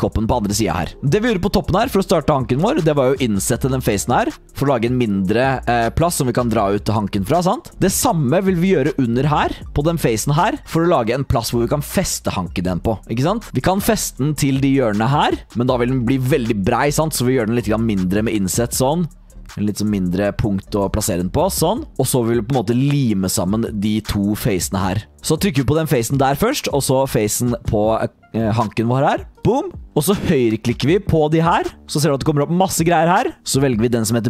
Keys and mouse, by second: 0.7 shift+middle click, 2.4 shift+middle click, 7.7 shift+click, 9.6 click, 9.6 3, 13.6 middle click, 20.8 i, 21.4 click, 23.7 click, 24.1 click, 24.6 click, 25.3 click, 26.3 click, 29.7 click, 30.6 click.